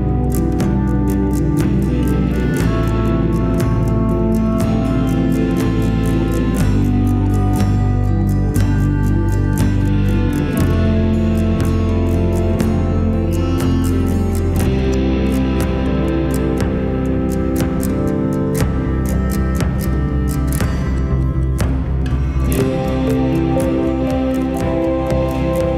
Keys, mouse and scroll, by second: 0.1 g, 3.2 click, 4.0-5.4 scroll up 3, 5.4 scroll up 1, 5.9 g, 10.1 alt+z, 11.4 g, 16.2-16.7 scroll down 5, 16.7-17.3 middle drag, 17.3-17.9 scroll down 5, 17.9-18.7 middle drag, 18.7 s, 19.8-20.2 scroll down 4, 20.2 s, 21.3 s, 22.0-22.3 scroll down 4, 22.3 s, 24.7-25.7 middle drag.